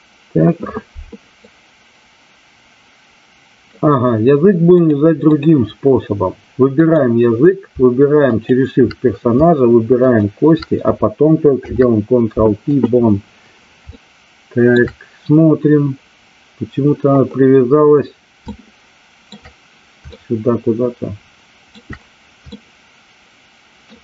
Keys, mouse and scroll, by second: 1.3-3.7 drag, 4.9-5.4 drag, 6.7 click, 8.3 shift+click, 9.9 shift+click, 13.9-14.7 shift+middle drag, 18.3-19.3 shift+middle drag, 20.0-21.6 shift+middle drag, 22.4-23.8 shift+middle drag.